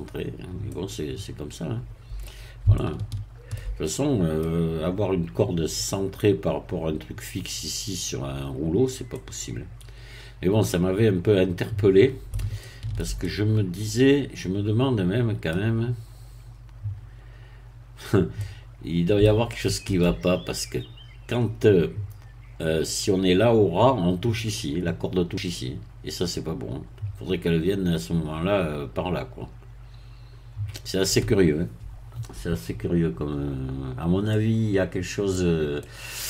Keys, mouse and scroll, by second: 0.7-2.5 middle drag, 2.7-4.5 shift+middle drag, 9.1-12.4 middle drag, 12.5-20.1 shift+middle drag, 34.3-35.5 middle drag, 35.8-36.2 middle drag.